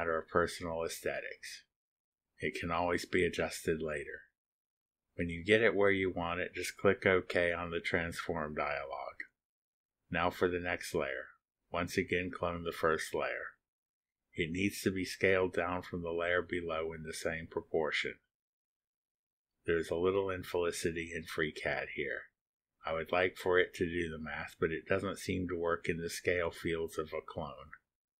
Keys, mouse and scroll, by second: 8.6 click, 12.9 click, 16.2 click, 18.3-18.9 scroll down 1, 21.1 click, 22.4-22.8 scroll down 1, 23.6 click, 25.3 0, 25.9 ., 26.4 8, 27.8-28.1 typing.